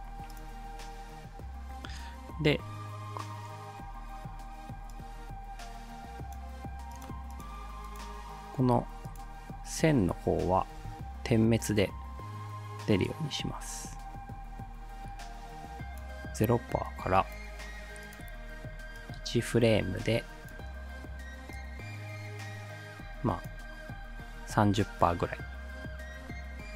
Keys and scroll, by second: 10.8 t.